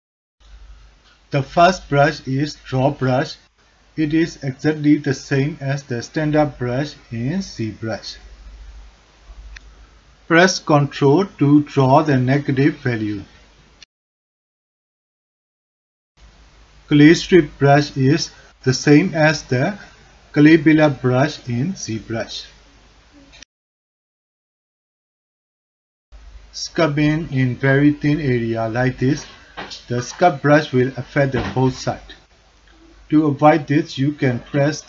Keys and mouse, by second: 0.6 alt+click, 1.0 ctrl+middle click, 1.4 alt+shift+click, 6.4 click, 7.7 click, 8.8 click, 9.7 middle click, 9.8 alt+click, 10.9-11.9 ctrl+drag, 12.5 middle click, 12.6 alt+click, 13.8 middle click, 13.8 alt+click, 14.3 click, 14.9 middle click, 15.3 click, 16.9 alt+click, 17.4 ctrl+alt+click, 17.7 alt+shift+drag, 18.0 click, 18.7 alt+click, 19.6 middle click, 20.5-21.6 middle drag, 22.0 alt+middle click, 22.3-23.0 ctrl+alt+middle drag, 25.2 alt+middle click, 26.1 click, 26.8 f, 27.0 click, 28.2-28.9 alt+drag, 29.2 alt+shift+drag, 31.2 alt+click, 31.8 ctrl+click, 32.5 ctrl+z, 34.5-34.8 drag.